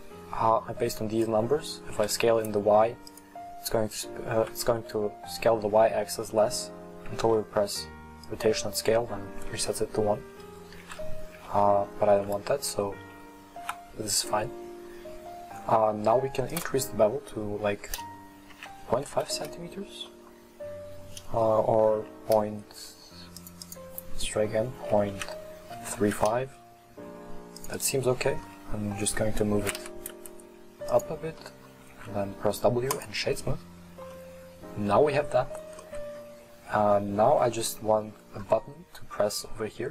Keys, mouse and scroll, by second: 2.0 s, 7.4 ctrl+a, 10.3 right click, 10.4 ctrl+z, 10.9 ctrl+z, 11.4 ctrl+z, 11.5 right click, 12.8 Tab, 12.8 right click, 14.2-16.6 middle drag, 16.6-19.6 drag, 20.1-22.0 middle drag, 22.0 ., 23.7-26.7 drag, 27.7 click, 28.5-29.7 middle drag, 29.7 g, 31.4 middle click, 32.0 w, 33.7-34.2 scroll down 1, 34.2-36.3 middle drag, 36.3-37.0 scroll down 2, 37.3-37.7 scroll down 1, 37.7-39.9 middle drag.